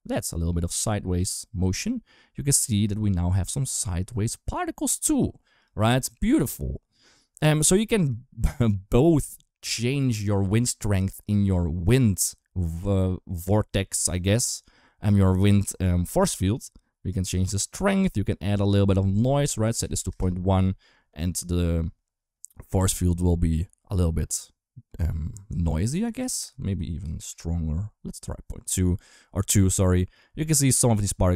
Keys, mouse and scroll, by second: 0.8 space, 5.4 click, 7.8 click, 18.5-20.0 drag, 26.1 click.